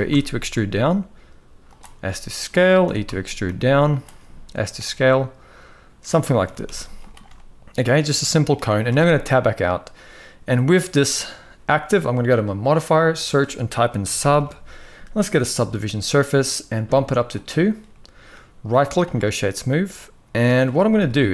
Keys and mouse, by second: 1.6 s, 3.8 s, 4.8 middle click, 6.2 e, 7.0-8.1 middle drag, 8.6 Tab, 8.9-9.3 middle drag, 10.4-10.7 middle drag, 12.2-15.5 drag, 17.6-18.0 middle drag, 19.1-20.1 middle drag, 20.7 KP_1.